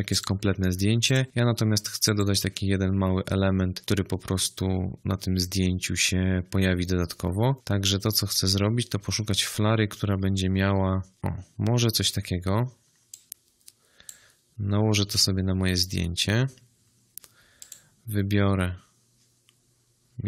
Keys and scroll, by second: 13.9 space.